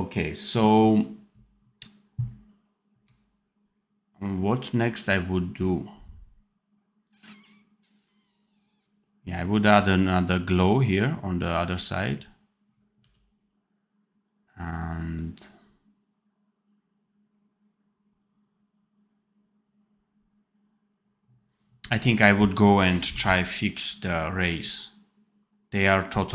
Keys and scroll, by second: 12.9 d, 23.1 ctrl+s.